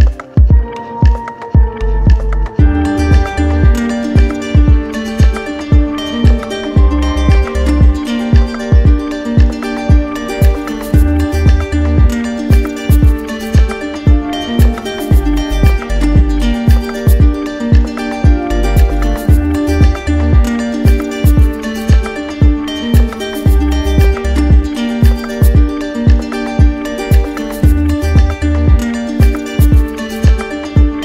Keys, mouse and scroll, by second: 1.5-2.6 drag, 3.1-4.2 drag, 6.2 click, 7.8 alt+click, 8.8 click, 9.6 click, 10.0 click, 10.3 w, 13.2 click, 13.9 alt+click, 14.3 click, 14.9 click, 15.1 alt+click, 15.4 click, 16.0 alt+click, 16.1 alt+click, 18.7 click, 19.4 click, 20.5 click, 26.2 click, 28.8 click, 30.1 click.